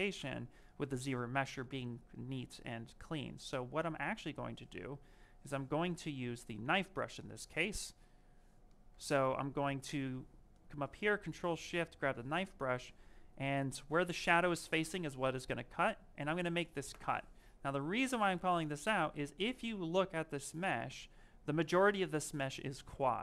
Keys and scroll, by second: 13.7 ctrl+shift+space, 20.2 s.